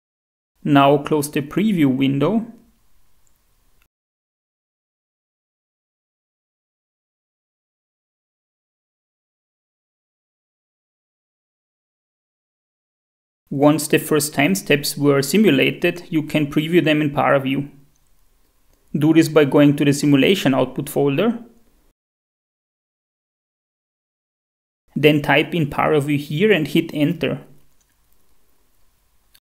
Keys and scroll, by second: 13.3 F5, 13.4 shift+F4, 27.2-28.8 typing.